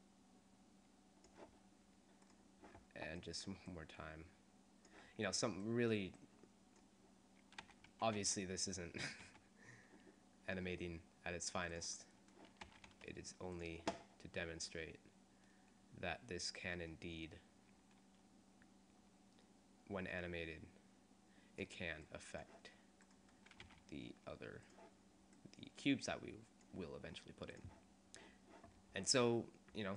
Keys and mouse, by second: 3.3 middle click, 6.3 click, 7.9 r, 12.9 r, 23.2 middle click, 23.8 r, 29.5 click.